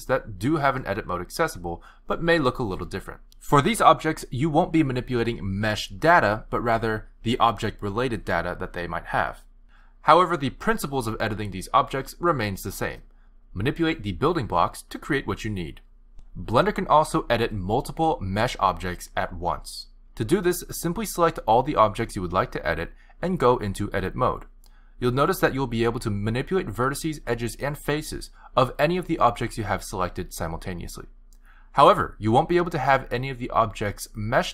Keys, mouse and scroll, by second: 0.2 g, 3.7 e, 4.6 e, 7.4 Tab, 9.6 r, 16.4 shift+d, 20.6 click, 21.4 shift+click, 24.6 click, 27.3 click, 27.8 shift+click, 28.2 g, 29.8 shift+click, 30.0 g, 31.0 shift+click, 31.4 shift+click, 31.8 shift+click, 32.5 g, 34.3 click.